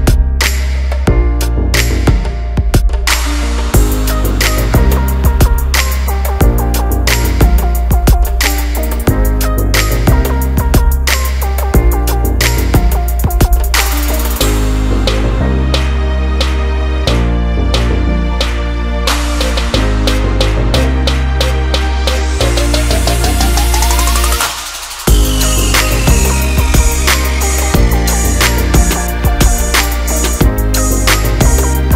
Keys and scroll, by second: 8.2 ctrl+alt+z, 13.2 Return, 13.6 Down, 14.1 Left, 17.8 Return.